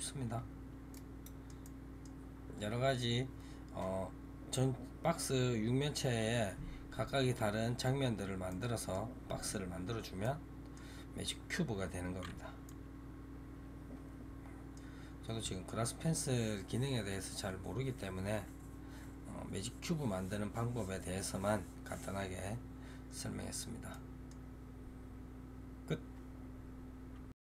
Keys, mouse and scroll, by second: 0.8-27.5 middle drag.